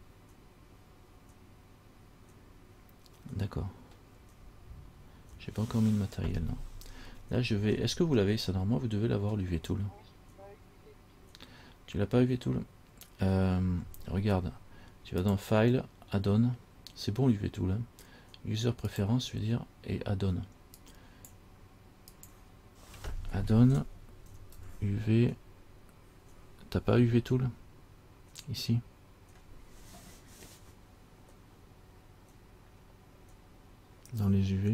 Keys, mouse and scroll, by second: 8.4-11.7 scroll down 1, 11.7 scroll down 1, 15.4 click.